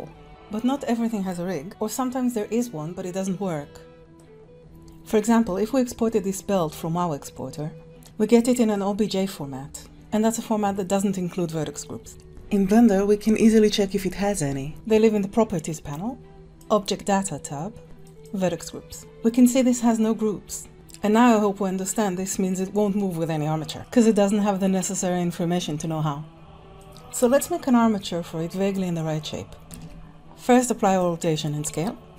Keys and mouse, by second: 0.7 click, 1.8 click, 2.1 click, 3.0 ctrl+Tab, 3.2-3.8 drag, 3.8 r, 16.5 click, 18.0 click, 29.9 ctrl+a.